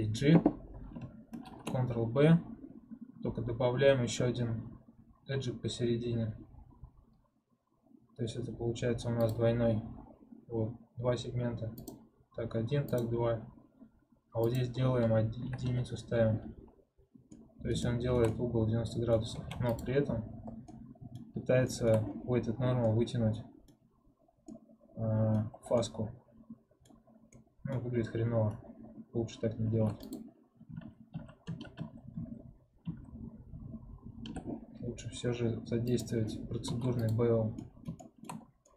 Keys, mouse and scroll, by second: 1.3 ctrl+b, 11.7-17.2 drag, 17.2-19.3 middle drag, 19.3 ctrl+Tab, 20.4 scroll down 1, 20.6 middle click, 21.2-21.6 scroll up 1, 21.6-23.8 shift+middle drag, 23.8-24.4 scroll up 1, 24.4-25.4 middle drag, 25.4 scroll down 1, 25.7-26.9 middle drag, 26.9 scroll up 1, 27.2-29.6 middle drag, 29.6 ctrl+Tab, 31.5 ctrl+z, 33.0 ctrl+z, 35.8 click, 36.6 ctrl+Tab, 37.5 middle click, 38.3 scroll down 1, 38.6 middle click.